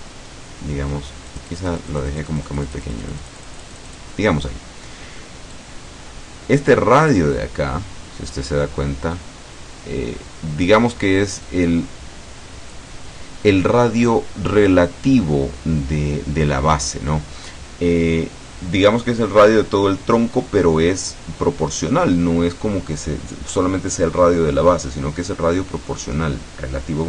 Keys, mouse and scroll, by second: 1.4-4.3 drag, 5.6-13.0 drag.